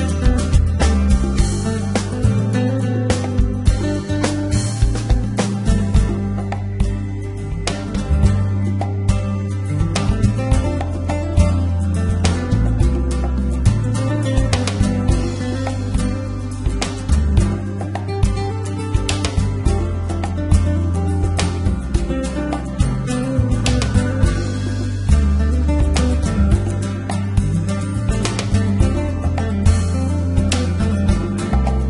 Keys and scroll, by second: 0.4 s, 0.6 x, 1.0 y, 5.5 1, 6.5 3, 7.3 5, 10.0 s, 10.4 y, 14.1 g, 14.2 x, 14.5 y, 17.3 a, 23.5 Escape, 25.4 Escape, 27.5 Escape, 29.2 Escape, 30.1 1, 30.7 z, 31.2 a, 31.6 b.